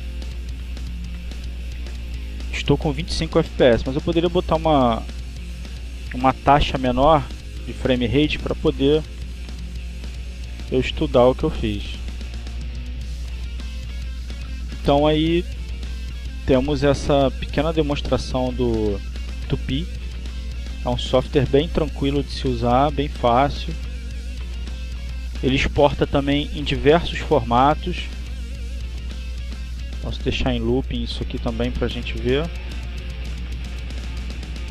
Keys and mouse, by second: 0.4 click, 2.7-4.3 drag, 4.5 click, 6.0 click, 9.0-10.3 drag, 12.4-13.7 drag, 14.3 click, 15.7 click, 17.3 click, 18.7 click, 20.6 click, 21.9 click, 23.3 click, 24.9 click, 26.3 click, 27.6 click, 29.0 click, 30.2 click, 31.7 click, 33.2 click, 33.9 click.